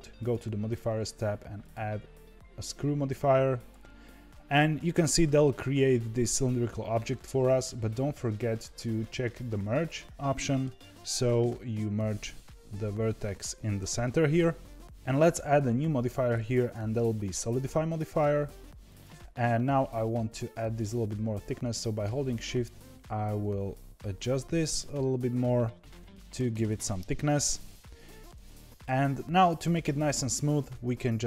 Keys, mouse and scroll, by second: 0.1 click, 1.5-4.6 drag, 9.7 click, 10.3-13.3 middle drag, 16.5-19.1 drag, 19.3-20.7 scroll up 1, 20.7-21.9 scroll up 1, 21.9-24.9 shift+drag, 26.9-31.2 middle drag.